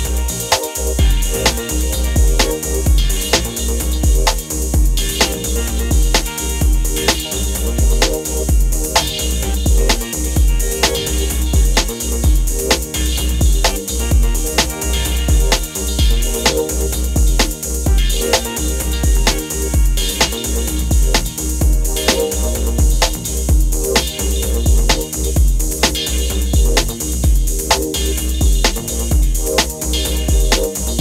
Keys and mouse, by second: 0.3 KP_1, 0.4 Tab, 0.7 ctrl+KP_Add, 3.6-4.8 typing, 3.6 KP_Enter, 5.2 Tab, 5.6 Tab, 6.4 Tab, 6.5 Tab, 7.7 click, 8.7 z, 8.9 x, 9.6 x, 9.7 shift+click, 9.8 x, 9.9 Tab, 10.8 ctrl+s, 12.1 7, 12.5 ctrl+3, 13.3 Tab, 13.4 Tab, 13.9 ctrl+KP_Add, 14.3 ctrl+KP_Add, 14.6 click, 16.1 ctrl+KP_Add, 16.3-16.7 right drag, 18.1 click, 18.6 click, 18.7 click, 20.3 shift+d, 21.0 click, 21.7 KP_3, 22.6 Tab, 23.6 ctrl+g, 23.6 click, 23.9 shift+a, 24.4 shift+click, 25.3 shift+click, 25.8 KP_1, 26.1 shift+right click, 26.5 shift+right click, 27.1 click, 27.7 click, 27.9 click, 28.3 click, 28.9 ctrl+c, 29.1 ctrl+c, 29.8 2, 30.0 KP_1, 30.4 shift+a, 30.8 click.